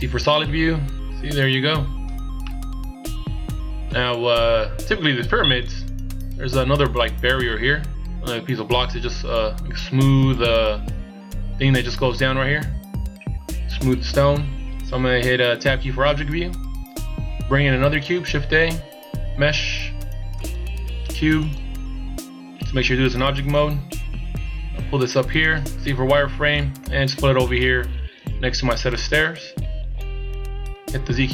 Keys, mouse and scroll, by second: 0.2 middle click, 2.4 middle click, 14.1 KP_1, 16.0 Tab, 18.1 shift+a, 23.6 click, 25.9 z, 26.6 click, 29.0 click.